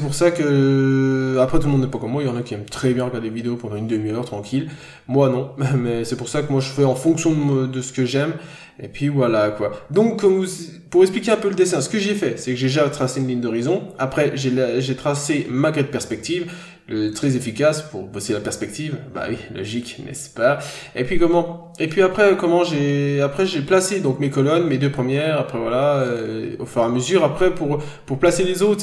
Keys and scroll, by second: 0.5 n, 0.8 scroll down 1, 1.9 b, 2.9 scroll down 1, 3.1 ctrl+z, 8.0-8.4 scroll down 1, 8.9 n, 9.2 ctrl+z, 11.5 scroll down 1, 11.8 scroll up 1, 12.0 ctrl+z, 14.9-15.3 scroll down 1, 15.3 ctrl+z, 17.6-18.0 scroll down 1, 18.2-18.5 scroll up 1, 20.3-20.7 scroll down 1, 22.6-23.0 scroll down 1, 27.2 ctrl+z.